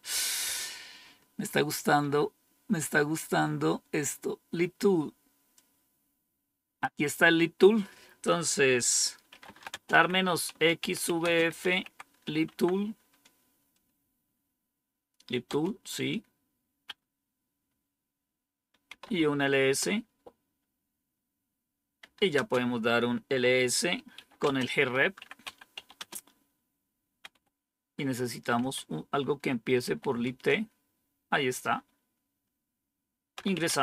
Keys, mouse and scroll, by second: 0.9-5.5 scroll up 3, 5.5-6.8 drag, 7.0 click, 7.6 click, 9.0-12.7 typing, 15.4 Return, 18.6-19.4 typing, 19.5 Return, 21.9-22.3 typing, 24.1-28.5 typing, 29.7-30.2 typing, 33.0-33.8 typing.